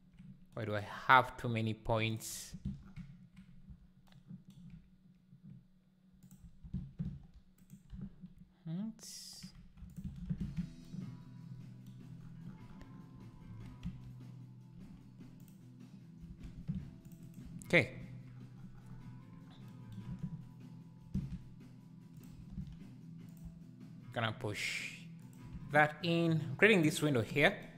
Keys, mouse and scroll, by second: 2.1 click, 2.5 ctrl+x, 3.8 z, 6.3 Left, 6.6 ctrl+x, 8.0 z, 9.5 2, 9.9 alt+Left, 10.2 ctrl+x, 10.5 1, 13.1 2, 13.5 1, 13.8 a, 15.5 m, 16.2 alt+a, 17.0 ctrl+r, 17.4 z, 21.0 ctrl+b, 23.4 alt+e, 25.5 Tab.